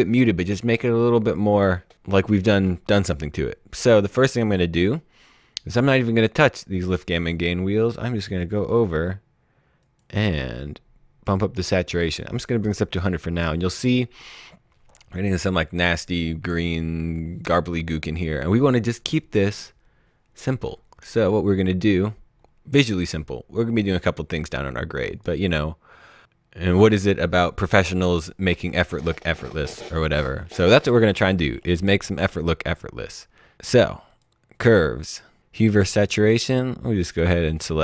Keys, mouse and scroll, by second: 3.8 click, 8.5 click, 25.1 click, 34.2 click, 37.0 click.